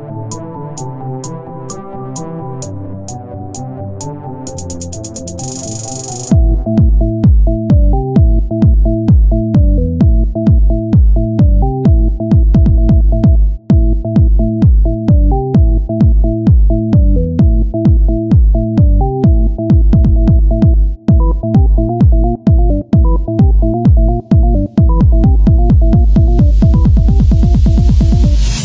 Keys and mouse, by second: 0.5 r, 2.6 z, 3.3 Tab, 3.4 click, 5.7 Tab, 6.1-8.1 drag, 8.1 s, 11.4 z, 13.8 z, 14.3 s, 16.8 o, 17.2 s, 19.2 s, 20.0 Tab, 21.3 Tab, 22.2-24.3 drag, 24.9 click, 26.1 Tab, 28.1 KP_7.